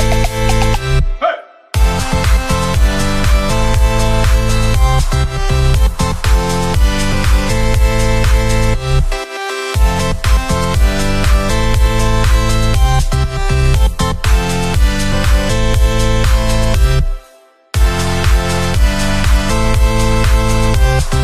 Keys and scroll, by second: 3.1 ctrl+z, 5.6 ctrl+z, 10.2 p.